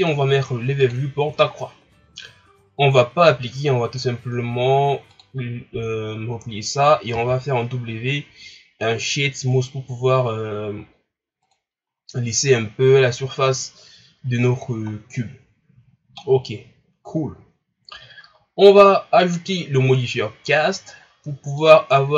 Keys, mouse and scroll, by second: 0.0-3.9 drag, 5.1-7.1 drag, 7.1 w, 11.8-14.2 scroll up 4, 14.2-15.6 scroll down 3, 15.6-16.4 scroll down 2, 16.4-19.2 scroll up 1, 21.7 click.